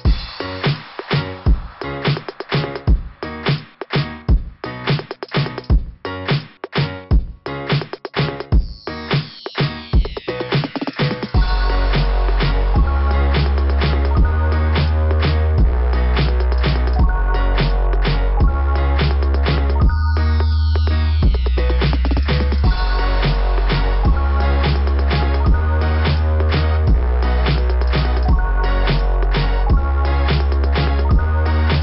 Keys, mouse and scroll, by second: 0.5 click, 0.6 click, 6.3 scroll down 4, 7.1-7.9 scroll down 6, 12.1 scroll up 1, 15.7 click, 15.9 click, 16.0 click, 17.5 click, 17.6 click, 19.7 click, 19.9 click, 25.7 click, 26.0 click, 28.7 click, 31.7 click.